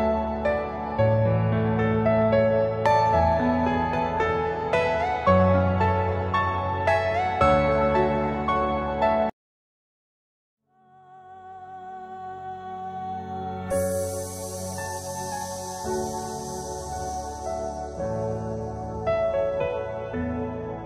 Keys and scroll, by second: 2.3 ctrl+g, 3.3 c, 3.7 Escape, 4.5 alt+c, 6.6 F4, 7.3 Escape, 7.5 F2, 9.2 F4, 11.7 alt+v, 12.4 F3, 14.0 alt+v, 14.7 F4, 15.2 Escape.